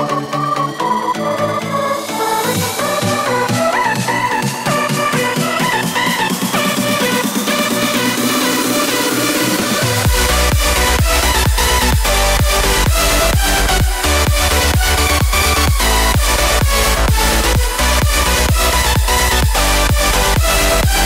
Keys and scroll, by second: 12.3 3, 13.2 alt+3.